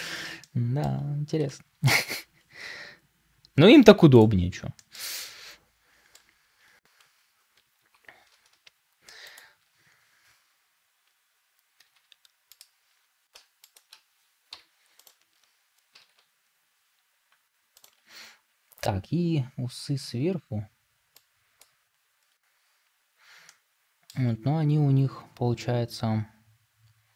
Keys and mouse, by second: 0.3 middle click, 1.8 shift+d, 4.6 shift+middle click, 5.1 middle click, 7.7 g, 11.7 r, 13.6 right click, 13.6 middle click, 15.8 r.